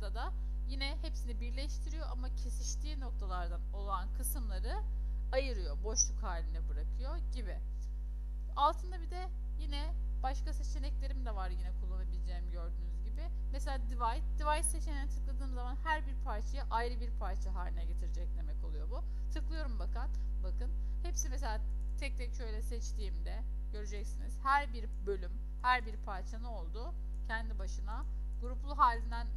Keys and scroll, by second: 8.5 ctrl+2.